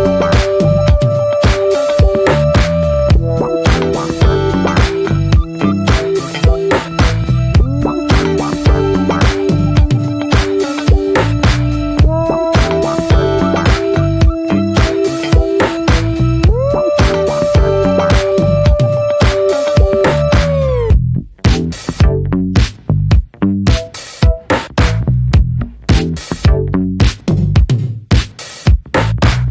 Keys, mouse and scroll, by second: 0.8 scroll down 3, 1.3 middle click, 1.6-2.2 scroll down 1, 2.2 alt+middle click, 2.4-2.8 scroll down 4, 2.8-3.2 scroll up 1, 3.5 shift+middle click, 3.7-6.2 scroll up 1, 6.2-8.3 drag, 8.3 scroll down 1, 8.8-10.0 shift+middle drag, 10.0-10.8 scroll up 3, 10.8-12.7 shift+middle drag, 12.7-14.9 drag, 14.9-15.5 scroll down 3, 15.5 middle click, 16.0-16.5 scroll up 1, 16.5 alt+middle click, 16.8-18.0 scroll up 1, 18.0 click, 18.2-19.0 scroll down 4, 18.4 middle click, 19.0 shift+middle click, 19.3-19.9 scroll up 2, 19.4 middle click, 19.9 shift+middle click, 20.2 scroll up 1, 20.3-21.6 middle drag, 21.6 click, 21.9 middle click, 22.3 ctrl+z, 23.2 alt+middle click, 23.8 middle click, 24.0-25.2 scroll up 2, 25.2 click, 25.6-27.0 middle drag, 27.0-28.4 drag, 28.4-28.9 scroll down 6, 28.5 middle click, 28.9 middle click, 29.0 scroll up 1, 29.2 shift+middle click, 29.4 scroll down 1.